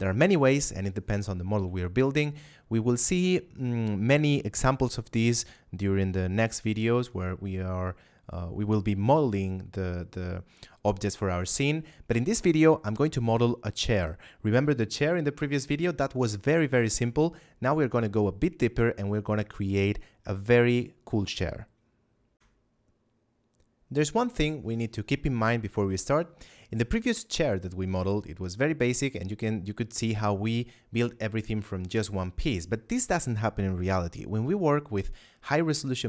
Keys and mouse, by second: 0.5 middle click, 1.7 shift+middle click, 3.3 middle click, 22.2 F9.